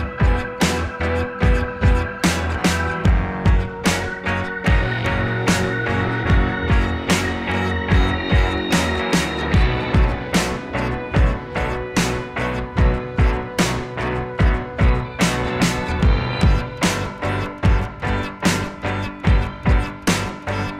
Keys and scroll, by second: 0.4 ctrl+a, 2.1 Up, 2.2 Down, 2.2 Right, 2.3 Up, 2.4 Right, 2.9 Right, 2.9 Down, 3.0 Left, 5.3 ctrl+z, 6.8 ctrl+v, 7.1 ctrl+c, 8.4 ctrl+c, 8.5 ctrl+v, 9.1 ctrl+v, 10.1 ctrl+c, 10.2 ctrl+v, 14.4 ctrl+z, 17.3 Right, 17.4 Left, 18.0 Right, 19.1 Right, 20.5 Left, 20.7 Right.